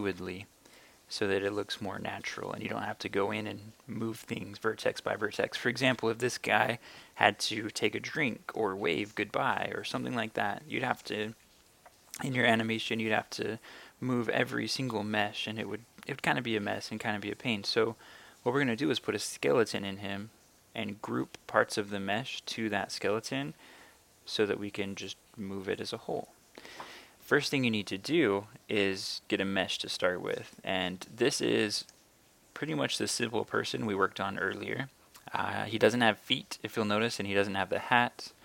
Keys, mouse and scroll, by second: 31.8 right click.